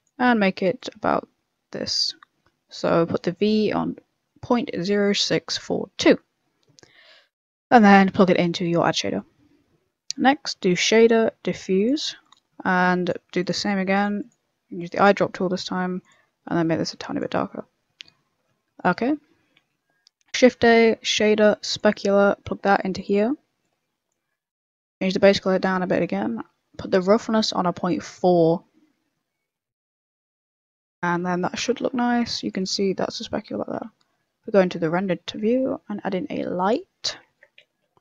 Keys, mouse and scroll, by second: 6.6 middle click, 8.1 click, 10.1 shift+a, 12.7 click, 13.4 click, 17.4 middle click, 18.2 middle click, 19.2 middle click, 19.5 middle click, 20.1 shift+a, 22.4 click, 23.6 click, 26.9 click, 30.3 click, 30.7 scroll up 2, 30.8 middle click, 31.6 click, 33.8 z, 34.8 scroll up 3, 35.1 middle click, 35.4 shift+a, 37.3 ctrl+z, 37.7 shift+a.